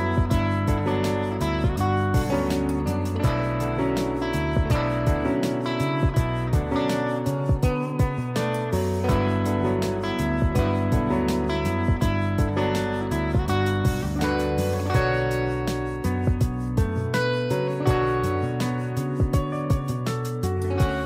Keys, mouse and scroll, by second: 1.6 click, 3.4 j, 9.5 click, 12.9 click, 15.6 x, 16.3 click, 18.6 click.